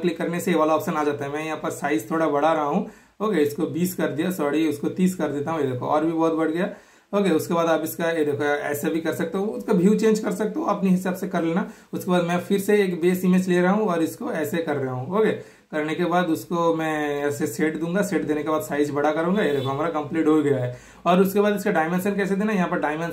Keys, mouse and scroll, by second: 2.4 super+click, 3.2 super+click, 3.7 super+BackSpace, 5.1 super+click, 6.6 super+scroll down 1, 6.8 super+click, 7.5 super+click, 11.0-12.7 super+middle drag, 12.8 super+click, 14.0 typing, 15.2 super+click, 17.0 super+click, 20.1 super+click, 21.1 super+click, 22.0-23.1 super+middle drag, 22.0 typing.